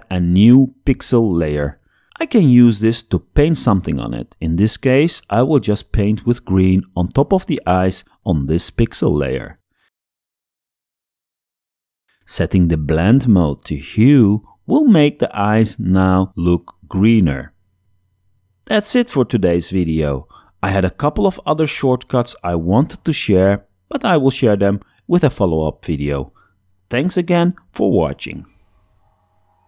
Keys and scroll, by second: 4.8 shift+super+b, 6.3 b, 7.1 b, 8.2 b, 9.5 space, 22.2 super+0.